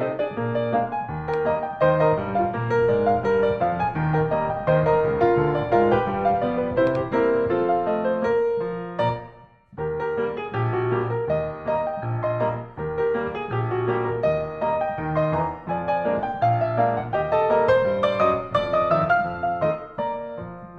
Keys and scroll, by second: 11.5 Right.